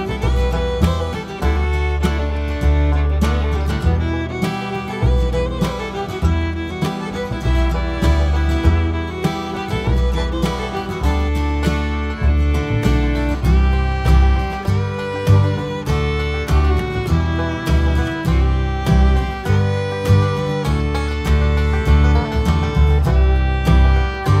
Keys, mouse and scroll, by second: 0.0 r, 0.8 KP_Decimal, 1.0 scroll down 1, 1.2 `, 1.5 Tab, 2.5 ctrl+r, 3.6 right click, 3.9 2, 4.1 alt+click, 4.5 alt+shift+click, 6.6 s, 8.2 alt+click, 8.5 e, 9.4 alt+click, 10.1 alt+shift+click, 10.7 ctrl+z, 11.0 alt+shift+click, 11.5 s, 12.3 right click, 12.5 s, 14.2 Tab, 15.3-17.1 drag, 17.1 Tab, 17.6 alt+click, 17.9 alt+shift+click, 19.3 ctrl+e, 19.6 Tab, 19.7 `, 20.7 right click, 20.8 Tab, 21.2 alt+click, 21.5 alt+shift+click, 22.1 ctrl+e, 22.4 `, 24.1 click, 24.1 KP_0.